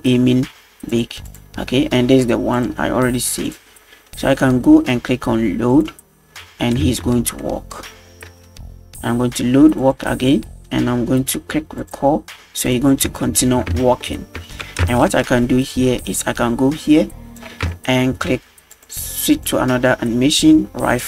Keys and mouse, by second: 0.9-1.4 drag, 2.6-3.5 drag, 5.7-6.0 drag, 6.9 space, 7.4-7.8 middle drag, 8.3 space, 9.8 click, 11.8 click, 13.1 space, 13.8 shift+middle drag, 14.8 space, 15.4 middle click, 16.2 click, 17.7-18.0 shift+middle drag, 18.7 click, 19.0 click, 19.3-21.0 drag.